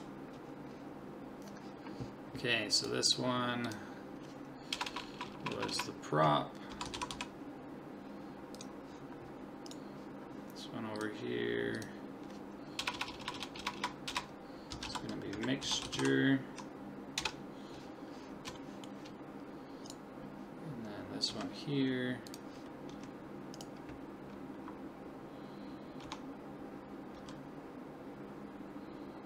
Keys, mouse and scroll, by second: 1.0-2.8 middle drag, 2.8 click, 4.9-5.7 typing, 9.7-11.6 right drag, 11.0-12.8 drag, 12.9 BackSpace, 13.1 BackSpace, 13.3 BackSpace, 13.8 BackSpace, 18.6-20.5 middle drag, 19.9-21.9 right drag, 21.3 g, 22.9 s, 26.0 Tab, 27.2 s.